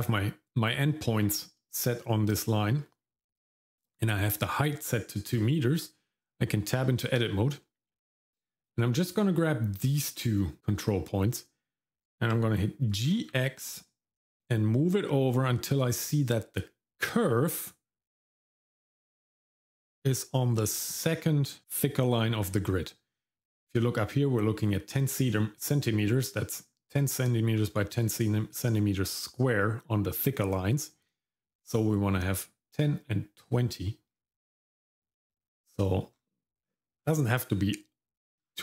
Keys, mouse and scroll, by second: 6.6 Tab, 8.6 click, 9.0 click, 12.9 g, 34.7-35.7 scroll up 3, 35.7-38.4 scroll up 8, 38.4-38.6 scroll down 1.